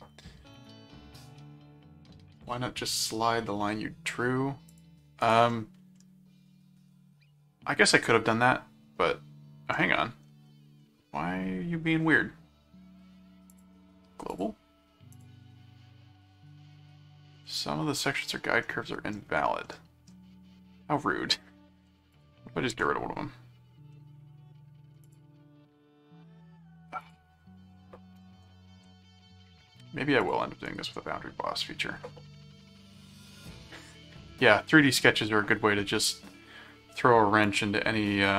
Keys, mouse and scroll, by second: 0.5 click, 4.7 click, 5.2 right click, 5.9-9.7 middle drag, 9.7 scroll up 2, 9.9 scroll down 2, 10.8 middle click, 13.5 click, 14.3 click, 15.1 click, 17.9 middle click, 18.6 middle click, 19.6 middle click, 22.1 click, 23.9 middle click, 25.0 click, 27.0 click, 28.9 middle click, 30.2 click, 30.7 right click, 37.4 click.